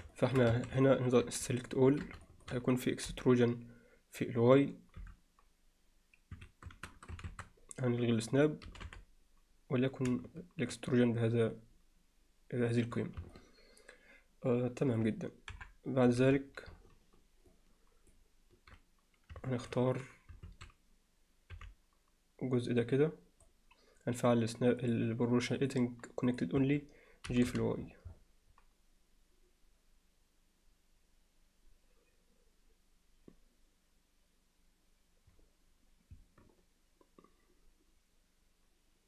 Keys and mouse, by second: 0.1 alt+shift+middle click, 0.5 a, 0.9 alt+middle click, 1.8 middle click, 2.3 alt+shift+middle click, 3.1 KP_7, 5.0 e, 7.3 shift+Tab, 8.7 g, 13.4-15.0 alt+middle drag, 15.5 KP_7, 16.2 z, 17.5-18.1 ctrl+middle drag, 19.5 alt+shift+middle click, 20.5 alt+a, 21.5 b, 24.8 click, 25.8-26.5 drag, 26.6 Escape, 27.3 g.